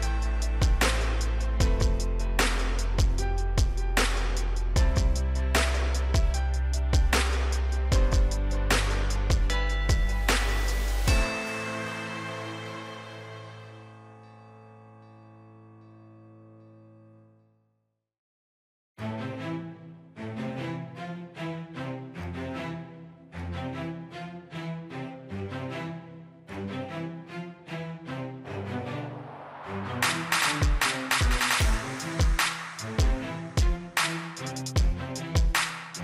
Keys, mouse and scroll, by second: 7.8 right click, 11.4-22.7 drag, 28.4 middle click, 28.7-30.6 middle drag, 32.8 click, 33.8 scroll down 1, 35.2 click.